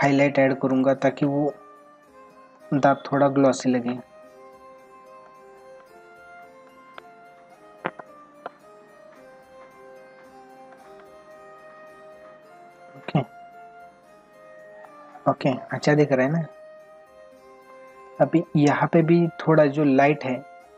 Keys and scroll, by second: 2.5 space, 13.0 ctrl+=, 18.1 space.